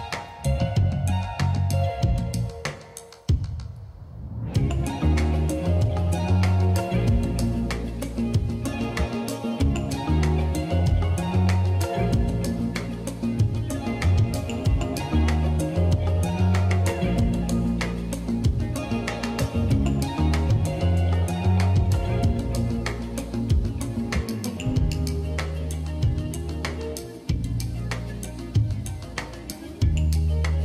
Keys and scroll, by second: 1.9 shift+super+7, 2.7 Return, 2.9-3.7 typing, 4.8-5.5 typing, 5.8 alt+shift+Down, 6.2 alt+shift+Down, 6.7-10.1 typing, 10.2 Up, 10.5 Down, 10.7 Down, 11.5 super+s, 15.9 space, 21.9-24.6 typing, 27.0 space.